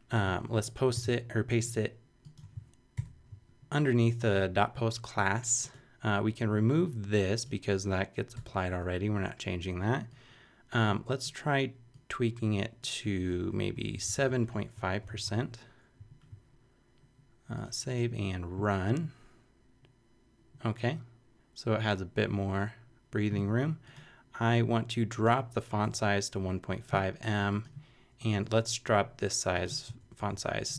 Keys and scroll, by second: 0.9 super+v, 2.9 shift+super+], 3.5 super+], 8.3 BackSpace, 13.7 Right, 13.9 shift+Left, 15.2 5, 16.0 super+5, 25.8 BackSpace, 28.3 BackSpace, 30.0 super+BackSpace.